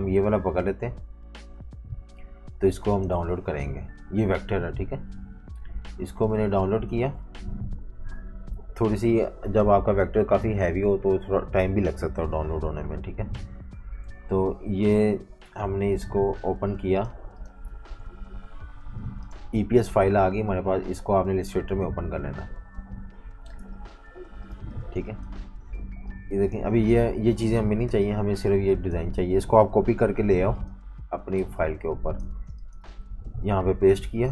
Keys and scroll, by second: 8.2 F18, 13.9 F19, 24.8 v, 25.0 space, 27.9 BackSpace, 29.7 super+c, 31.4-33.0 typing, 33.0 super+v.